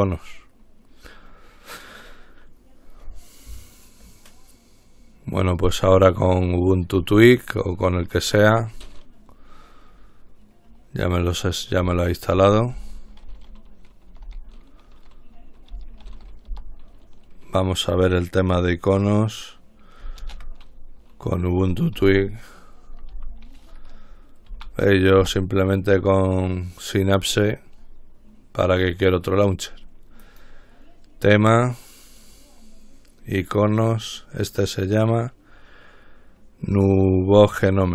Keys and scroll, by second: 11.9-14.5 typing, 15.9-17.1 typing, 19.2 typing, 22.2-23.8 typing, 24.7 ctrl+Down, 25.3 Return.